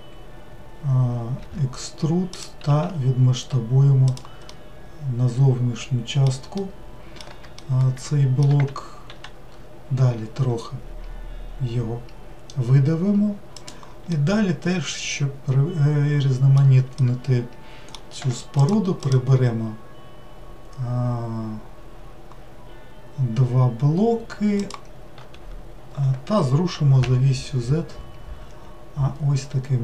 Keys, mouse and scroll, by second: 4.5-9.1 middle drag, 9.1 e, 14.2-18.6 middle drag, 18.6 shift+click, 19.0 shift+click, 24.6 shift+click.